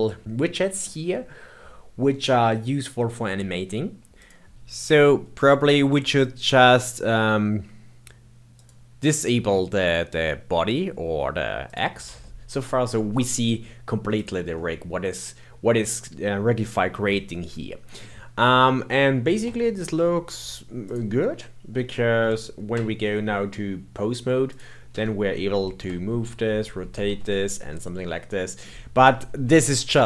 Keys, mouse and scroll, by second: 4.1 click, 5.0-8.0 middle drag, 8.5 click, 11.7 click, 12.2-14.1 shift+middle drag, 14.1 click, 14.5-19.4 middle drag, 19.4 Tab, 19.7 Tab, 20.8 click, 21.2-22.2 middle drag, 22.2 ctrl+Tab, 24.5 click, 24.9 g, 26.2 r, 27.7-30.0 middle drag.